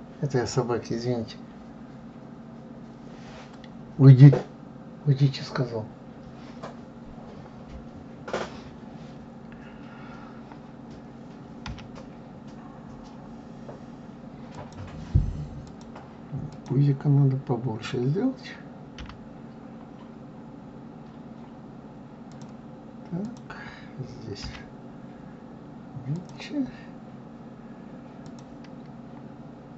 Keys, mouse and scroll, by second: 11.7 g, 15.6 click, 16.5 click, 19.0 g, 23.2 click, 24.4 g, 28.2 click.